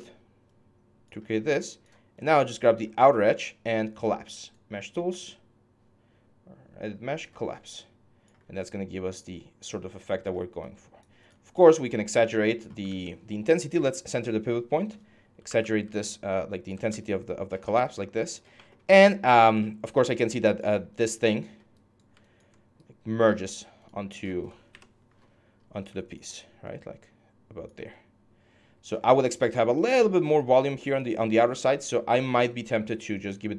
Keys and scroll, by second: 2.2 shift+6, 11.3 r, 12.6 ctrl+z, 15.0-16.7 typing, 23.1 4, 24.5 ctrl+F11.